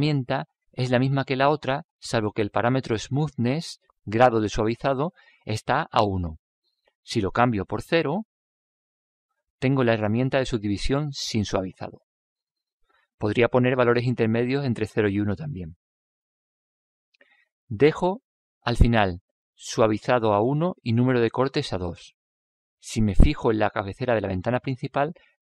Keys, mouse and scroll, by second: 7.5-9.3 drag, 10.5-12.3 middle drag, 13.7-15.4 drag, 15.5 click, 18.2 click, 19.9-21.7 drag.